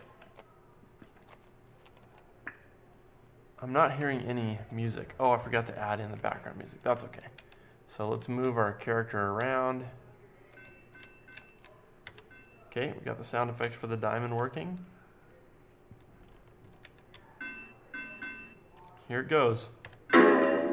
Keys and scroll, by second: 7.4 Up, 8.1 Up, 8.4 Right, 9.1 Right, 9.9 Up, 9.9 Right, 10.6 Right, 10.6 Up, 11.3 Left, 12.0 Down, 13.9 Left, 14.5 Left, 15.1 Left, 16.2 Down, 17.1 Down, 17.6 Down, 18.7 Down, 19.8 Down.